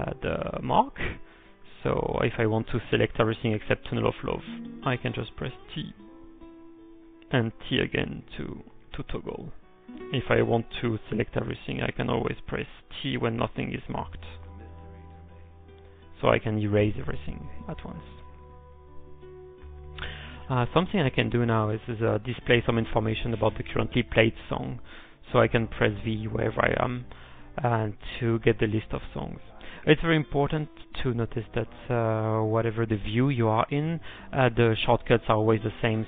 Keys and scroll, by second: 0.1-0.9 typing, 2.1 m, 6.4-7.1 typing, 8.7 t, 10.1 t, 11.2 t, 12.1 ctrl+p, 13.4 u, 16.0 t, 20.8-22.1 typing, 22.3 ctrl+p, 22.6 ctrl+p, 23.0 ctrl+p, 27.3-28.1 typing.